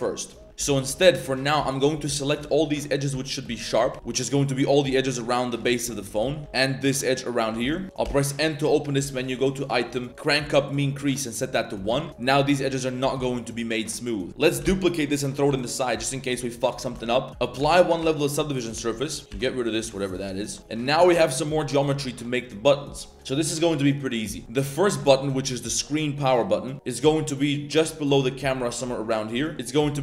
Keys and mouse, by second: 0.1 middle click, 0.6 z, 0.6 middle click, 0.8 z, 1.1 alt+shift+click, 1.6 alt+shift+click, 2.0 middle click, 2.4 alt+shift+click, 2.8 shift+middle click, 3.3 alt+shift+click, 3.6 middle click, 3.9 shift+middle click, 3.9 z, 4.0 middle drag, 5.4 middle drag, 6.2 z, 6.6 z, 6.8 middle drag, 7.5 shift+middle drag, 7.7 z, 8.0 n, 10.1 click, 11.7 middle click, 11.9 Tab, 12.5 Tab, 12.6 middle click, 13.2 Tab, 13.2-14.3 middle drag, 14.3 Tab, 14.7 shift+d, 15.5 g, 16.2 middle click, 16.6 middle drag, 17.3 ctrl+z, 17.6 ctrl+a, 18.0 Tab, 18.6-20.6 typing, 18.7 click, 19.2 click, 20.0 alt+click, 20.9 click, 21.6 ctrl+shift+click, 29.0 middle click, 29.4 middle click, 29.5 ctrl+shift+3, 29.6 middle click.